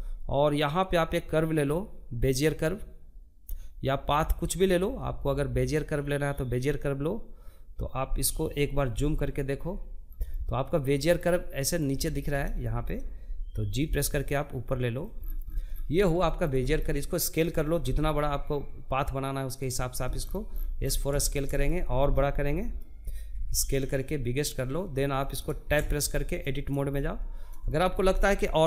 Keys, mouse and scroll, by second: 7.4 KP_Decimal, 8.5 scroll down 1, 8.7-10.8 middle drag, 10.8 scroll down 1, 11.0-12.3 shift+middle drag, 12.3 g, 13.6-14.7 scroll down 14, 14.7-16.3 shift+middle drag, 16.3 s, 18.7-19.6 scroll down 14, 19.6-21.8 shift+middle drag, 21.8 s, 23.6 shift+middle click, 24.4 Tab, 24.8 middle click, 25.3-25.8 scroll down 1, 25.8 scroll up 1, 26.1 shift+middle click, 26.4 scroll down 1, 26.6-28.5 middle drag, 28.5 click.